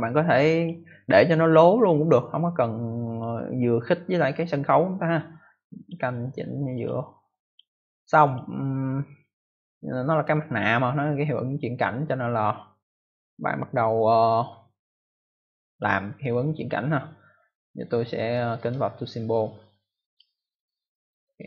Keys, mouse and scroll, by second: 3.0 click, 5.7 click, 6.7 click, 7.4 click, 15.6 click, 18.5 right click, 20.0 click.